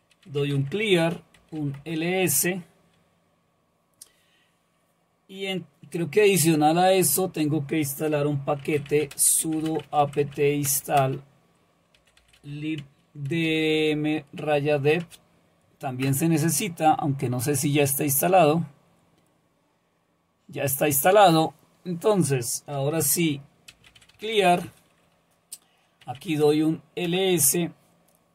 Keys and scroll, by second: 0.0-1.9 typing, 8.4-15.5 typing, 16.0 Return, 23.5-24.7 typing, 25.8-26.5 typing, 27.1 Return.